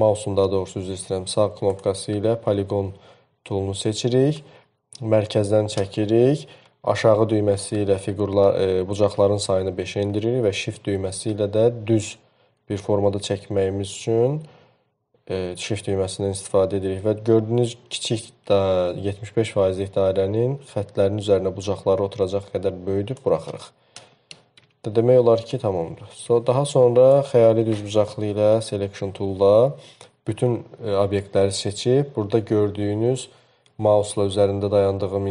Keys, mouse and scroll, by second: 0.0-2.1 right drag, 7.9 Up, 7.9 Down.